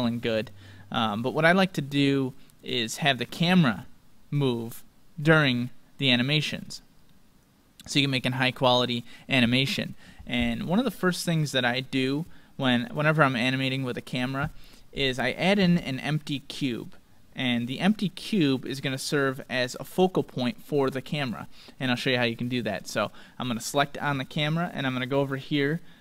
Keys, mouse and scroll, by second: 2.6-5.1 drag, 4.3-10.5 middle drag, 10.8-12.7 scroll down 1, 12.7 scroll down 1, 13.2-15.8 middle drag, 19.0-20.9 middle drag, 20.0-23.8 drag, 23.6-25.5 right drag.